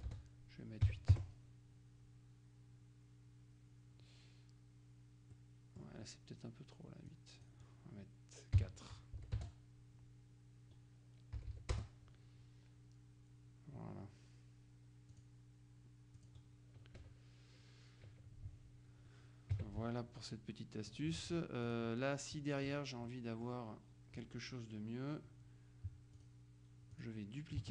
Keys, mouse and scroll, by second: 0.9 KP_8, 1.2 KP_Enter, 5.4-6.4 drag, 7.2 click, 8.7 KP_4, 9.3 Delete, 9.5 Return, 11.5 Delete, 11.8 Return, 15.2 click, 16.3 click, 17.1 KP_Subtract, 18.2 KP_Subtract, 19.6 KP_Subtract, 20.6 middle click, 21.8 click, 23.2-26.2 middle drag, 26.2 click, 27.0 click.